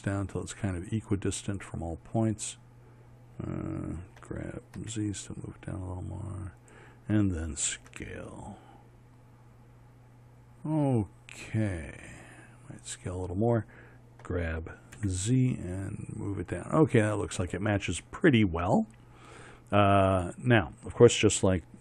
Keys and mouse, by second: 4.8 g, 8.5 s, 14.9 g.